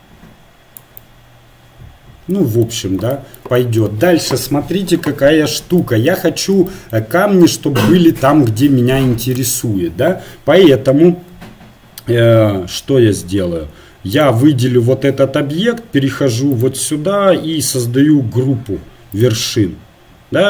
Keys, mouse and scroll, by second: 0.8 click, 1.4-3.9 middle drag, 5.8 Tab, 14.5-19.2 right drag, 19.2-20.4 drag.